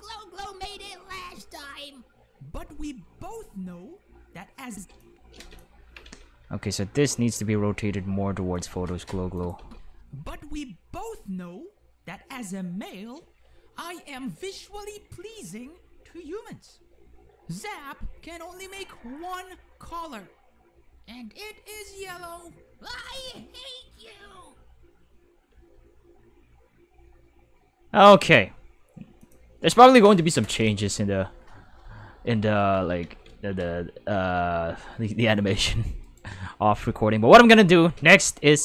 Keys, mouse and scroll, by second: 4.7-6.7 typing, 5.0 click, 8.5 click, 9.4 click, 9.5 space, 9.7 5, 25.5 space, 25.7 5, 29.2 click, 30.0 ctrl+5, 33.0 ctrl+5, 34.5-34.9 shift+middle drag, 36.0 right click, 37.8 space, 37.9 5.